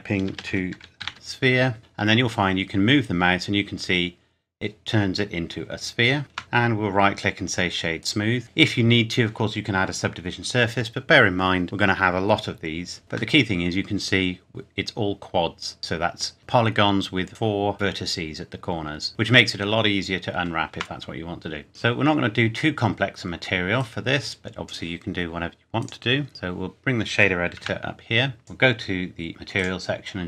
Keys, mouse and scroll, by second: 0.3-1.5 typing, 1.8 click, 6.2 click, 6.4 Tab, 6.6 right click, 8.0 click, 13.0 Tab, 13.4 middle click, 17.8 middle click, 19.1-19.6 scroll down 1, 20.8 Tab, 21.6-22.0 scroll down 1, 23.8 click, 27.6 n, 28.1-28.4 scroll up 1, 28.4 click.